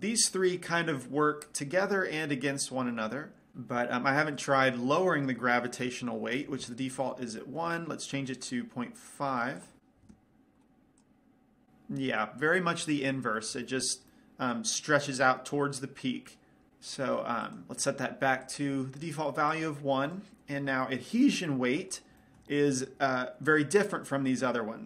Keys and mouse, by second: 4.9-6.7 drag, 9.9 click, 11.4 click, 14.0-16.3 middle drag, 17.9-20.0 right drag, 20.0-22.0 drag, 21.9-24.8 middle drag.